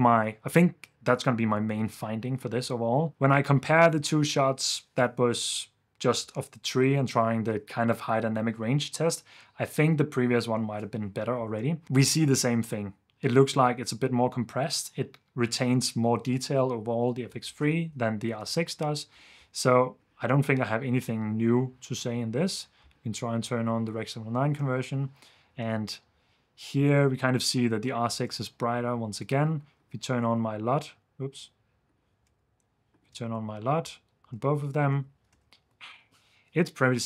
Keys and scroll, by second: 18.4 super+d, 21.0 super+d, 22.7 super+d, 25.6 super+f, 28.3 super+f, 29.3 super+s, 30.3 super+d, 32.3 super+d, 33.3 super+d, 34.9 super+f.